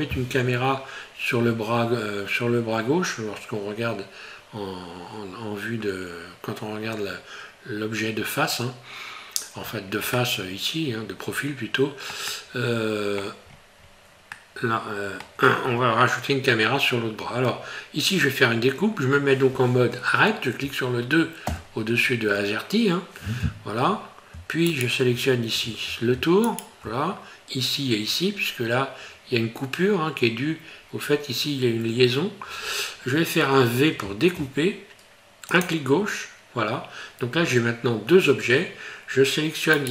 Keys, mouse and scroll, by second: 0.3 scroll up 1, 9.6-10.0 scroll down 5, 10.2 middle click, 12.3 middle click, 13.5-14.0 scroll up 5, 14.3 middle click, 24.7 alt+right click, 26.5 alt+shift+right click, 39.8 right click.